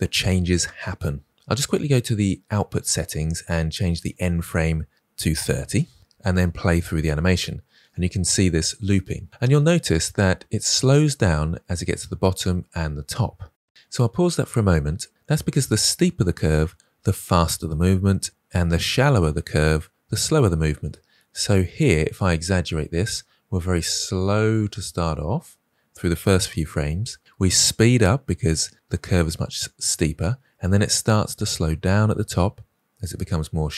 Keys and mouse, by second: 4.1-6.0 drag, 6.6 space, 13.7 space, 21.4-33.7 drag.